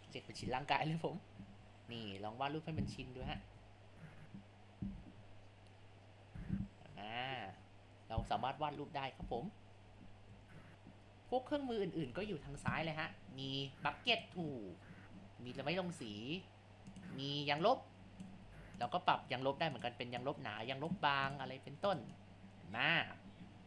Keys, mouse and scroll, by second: 1.5 ctrl+z, 1.8 click, 3.3 ctrl+z, 3.5 ctrl+z, 3.9-11.6 drag, 11.6 ctrl+z, 11.8 ctrl+click, 12.4 ctrl+z, 14.1-18.5 drag, 18.5 ctrl+z, 18.8-21.1 drag, 21.1 ctrl+z, 21.3-23.6 drag.